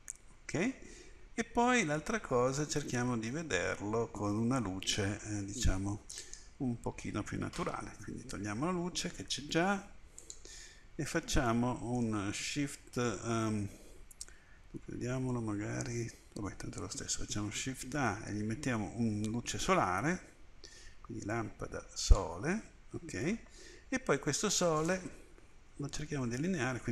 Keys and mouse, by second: 9.3 Delete, 11.6-15.8 drag, 17.9 shift+a, 21.4-23.3 middle drag, 23.3 click, 25.6 KP_1.